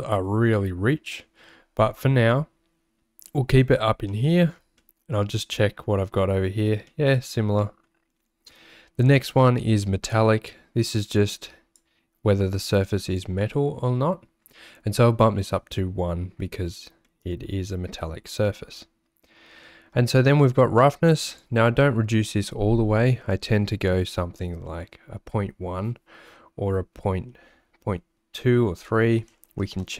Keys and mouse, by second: 4.1 middle click, 4.9 middle click, 7.0 middle click, 7.6 middle click, 11.7-13.2 drag, 17.1 middle click, 21.4-29.9 drag.